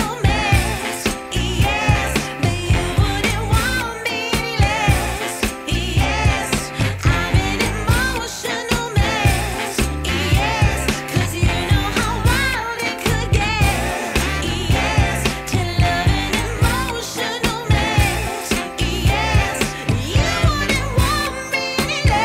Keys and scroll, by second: 1.4 ctrl+z, 5.7 w, 7.6 F4, 10.3 5, 11.0 F4, 11.8 4.